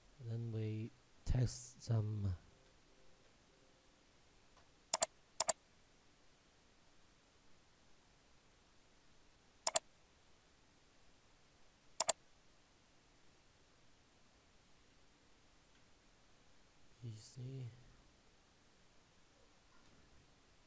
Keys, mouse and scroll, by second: 0.7 Caps_Lock, 2.1-3.1 typing, 4.9 click, 6.7-8.0 scroll down 1, 8.7-9.7 scroll up 1, 9.7 click, 13.4-14.1 scroll down 1, 14.1-14.9 scroll up 1, 14.9-15.7 typing, 19.7 Return.